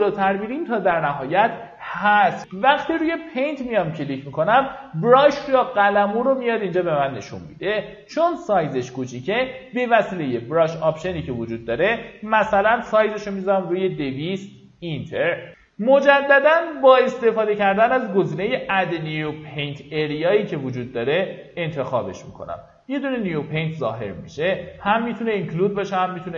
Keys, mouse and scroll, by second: 2.8 click, 3.4 alt+middle click, 4.4 alt+middle click, 8.6 click, 11.9 KP_2, 14.3 click, 15.8 click.